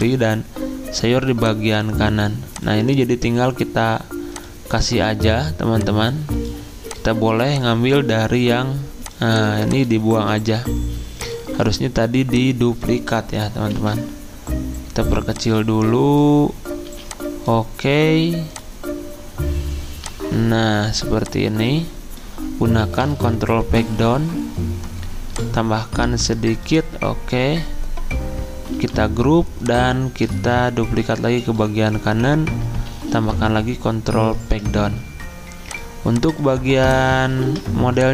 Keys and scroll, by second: 10.5 Delete, 11.4 Delete, 13.7 ctrl+g, 16.9 z, 23.0 ctrl+Page_Down, 23.2 ctrl+Page_Down, 28.8 ctrl+g, 32.9 ctrl+Page_Down, 33.0 ctrl+Page_Down, 37.4 ctrl+z.